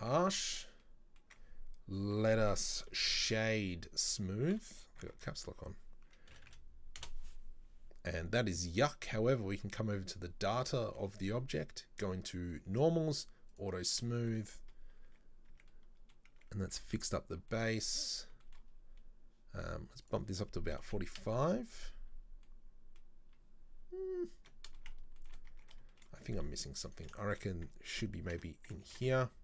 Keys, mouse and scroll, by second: 0.1 Tab, 0.2 middle drag, 0.5-0.9 scroll down 1, 0.9-2.5 middle drag, 2.5 space, 9.6 click, 12.6 click, 13.6 click, 14.3 shift+middle click, 14.6-15.2 scroll up 1, 15.2 Tab, 15.6 Tab, 15.8 middle click, 16.4 Tab, 16.8 Tab, 17.3 scroll down 2, 17.6-18.2 shift+middle drag, 18.2 scroll up 1, 18.5-18.8 shift+middle drag, 18.8-20.1 scroll up 1, 20.1-22.2 drag, 22.2-22.5 scroll down 2, 22.5-23.5 middle drag, 23.5-24.3 scroll up 4, 24.3-24.9 scroll down 3, 24.9 shift+middle click, 25.6 Tab, 26.0 shift+middle click, 26.2-27.0 scroll up 1, 27.0 alt+right click, 27.3-28.9 shift+middle drag, 28.9 ctrl+b.